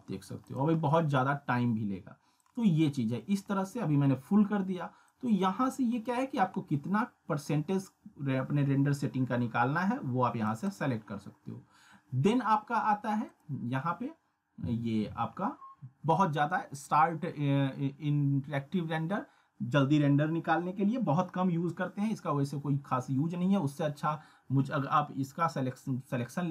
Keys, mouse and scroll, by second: 0.8-1.1 scroll down 1, 1.1 scroll up 1, 2.4-3.3 drag, 13.3 click.